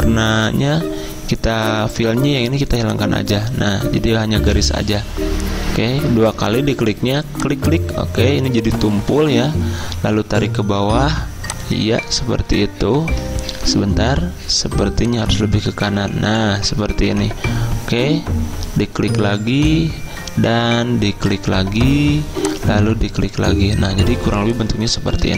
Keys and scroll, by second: 13.6 ctrl+z.